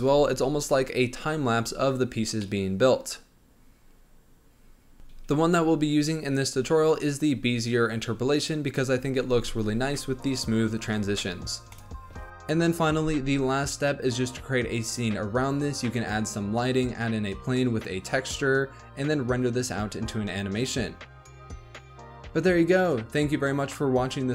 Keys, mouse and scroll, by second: 0.1 space, 1.4 scroll up 1, 2.0 scroll down 1, 2.4-4.9 middle drag, 12.3 scroll down 1, 12.4 middle click, 13.0 click, 13.2 scroll up 1, 13.6 click, 13.9-16.4 typing, 14.6-15.3 scroll up 12, 15.6-16.4 scroll down 17, 16.2 middle click, 16.6 scroll up 5, 16.8 click, 17.1 click, 17.3 middle click, 17.5-20.8 typing, 17.5 click, 18.0 shift+middle click, 18.1 scroll up 5, 18.5 shift+middle click, 19.3 scroll down 1, 19.6 click, 19.7 scroll up 1, 20.7 click, 22.5 space, 22.7 space.